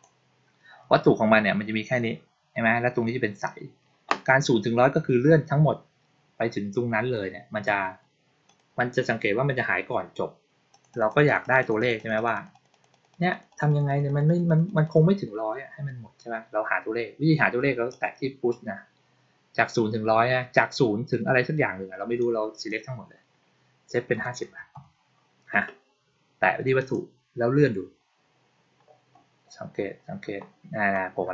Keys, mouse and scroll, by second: 8.4 click, 10.6 click, 10.8 click, 11.0 click, 11.2 click, 11.3 click, 11.5 click, 11.7 click, 11.9 click, 12.1 click, 12.3 click, 12.4 click, 12.6 click, 12.8 click, 13.0 click, 13.2 click, 13.4 click, 13.6 click, 13.8 click, 14.0 click, 14.2 click, 14.4 click, 14.6 click, 14.8 click, 17.8 click, 22.1 click, 26.7 click, 27.4-29.0 scroll up 2, 29.0-31.3 scroll down 2.